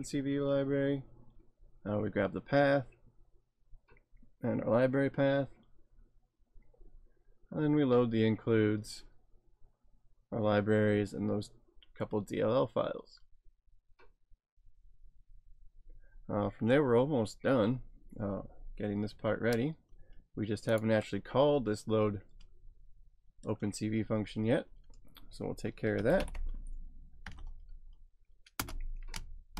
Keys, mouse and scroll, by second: 3.9-5.2 scroll down 1, 5.3 scroll down 1, 6.3 scroll down 1, 6.8 scroll down 1, 13.3-13.9 scroll down 1, 13.9 scroll down 1, 15.8-17.1 scroll up 3, 17.5-18.8 scroll down 3, 20.7 click, 21.4-23.7 scroll up 3, 23.7-25.1 scroll down 1, 25.1 scroll down 3, 26.0-27.8 typing, 28.6 Return.